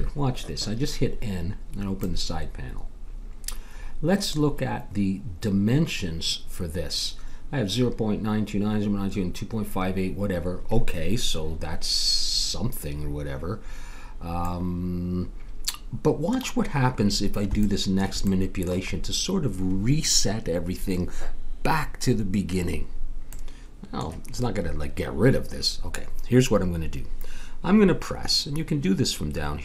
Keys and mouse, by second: 2.0-3.8 drag, 14.6-16.1 middle drag, 17.6 middle click.